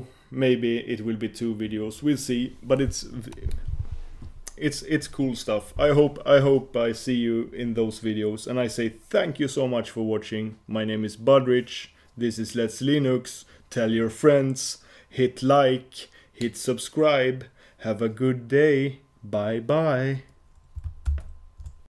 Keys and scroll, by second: 21.4 super+Print.